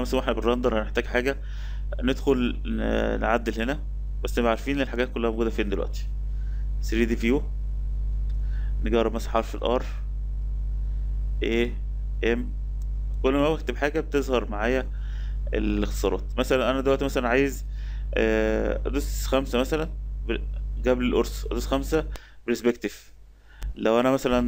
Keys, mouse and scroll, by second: 2.7 click, 2.9 drag, 3.2-6.1 drag, 6.4 click, 8.9 r, 11.4 a, 12.5 m, 15.1 Escape, 15.4 Escape, 19.6 KP_5, 21.2 KP_5.